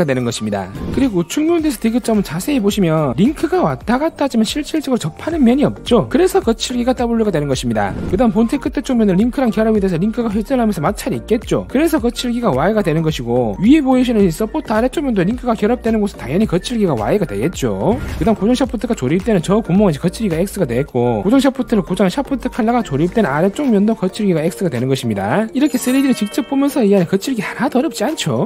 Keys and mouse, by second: 0.7 click, 1.1-3.0 drag, 3.4 shift+middle click, 3.9-5.0 drag, 5.5 shift+middle click, 6.1 middle click, 6.7-8.0 drag, 9.7-11.4 drag, 11.9 shift+middle click, 13.0 middle click, 13.3 click, 14.3-18.1 drag.